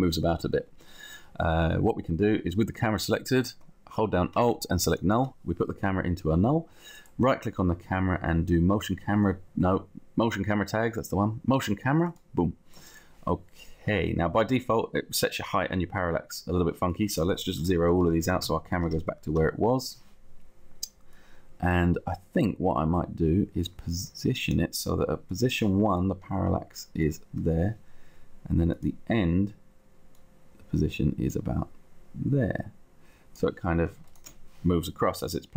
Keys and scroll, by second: 17.7 0, 17.9 Tab, 19.0 Return, 20.2 Return.